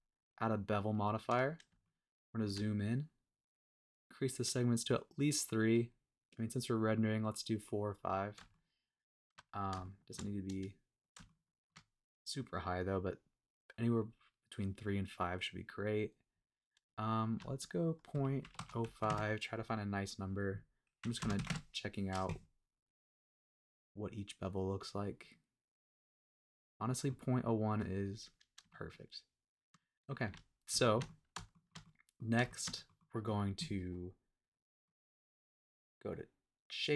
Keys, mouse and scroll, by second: 1.0-1.4 scroll up 1, 1.4-1.7 scroll down 1, 1.8-2.7 shift+middle drag, 3.9 click, 8.5-9.5 shift+middle drag, 9.6 scroll up 1, 9.8 shift+middle click, 10.2 scroll down 3, 10.5 scroll up 2, 11.3-11.8 shift+middle drag, 17.3-19.1 shift+drag, 20.4-21.5 drag, 21.5 KP_Decimal, 21.5 KP_3, 23.0-23.3 scroll up 1, 23.3 scroll down 1, 24.8 click, 25.2 click, 26.8 middle click, 27.1-27.4 scroll down 2, 27.4-27.8 middle drag, 27.9 scroll up 2, 28.3-28.6 scroll down 1, 28.7-30.2 shift+middle drag, 30.3-30.7 shift+scroll down 3, 30.8 shift+middle click, 31.1 middle drag, 31.5 shift+middle click, 31.8-32.2 middle drag, 32.5 shift+middle click, 32.7 middle click, 33.0-33.3 middle drag, 34.8-35.3 middle drag.